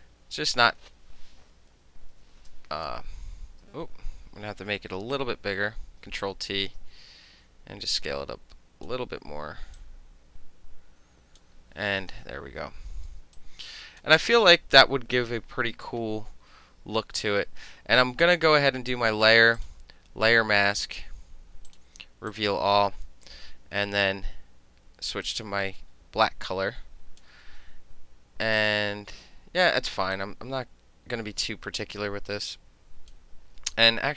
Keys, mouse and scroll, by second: 1.7 ctrl+=, 2.2 ctrl+=, 2.9 space, 5.1 ctrl+t, 6.3-8.9 shift+drag, 9.8-11.4 drag, 11.4-12.6 middle drag, 13.1 space, 13.4 click, 19.6 click, 21.7 click, 22.4 click, 23.4 b, 25.3 click, 26.3 click, 27.5 ctrl+z, 28.6 click, 30.2-33.2 drag, 33.6 ctrl+z.